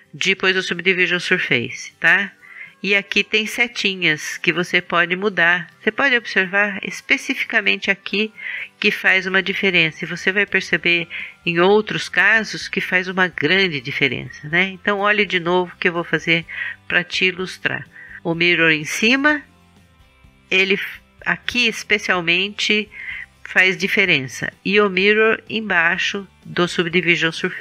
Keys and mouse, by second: 3.8-5.7 drag, 5.7-9.0 middle drag, 18.2 click, 18.9-25.7 middle drag, 25.7-27.5 drag.